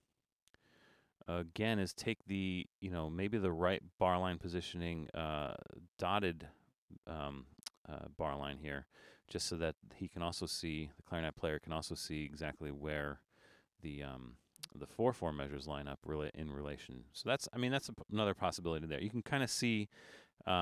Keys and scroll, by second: 18.7 super+-, 19.9 super+-.